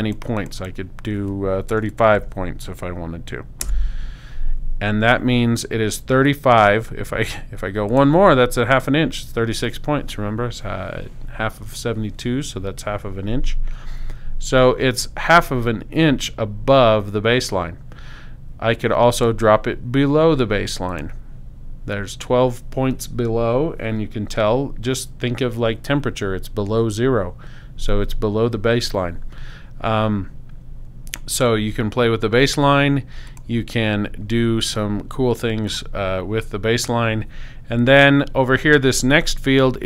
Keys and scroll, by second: 1.8-2.7 typing, 3.6 Tab.